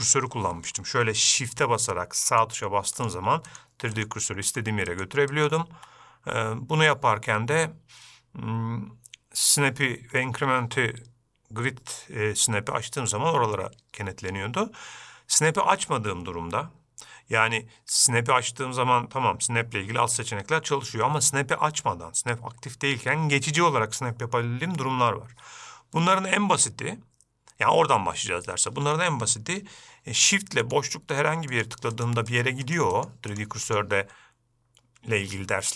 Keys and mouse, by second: 2.7 shift+right click, 3.3 shift+right click, 3.8 shift+right click, 4.3 shift+right click, 4.8 shift+right click, 5.2 shift+right click, 5.7 shift+right click, 31.0 shift+right click, 31.5 shift+right click, 31.9 shift+right click, 32.3 shift+right click, 32.6 shift+right click, 33.0 shift+right click, 33.3 shift+right click, 33.7 shift+right click, 34.0 shift+right click.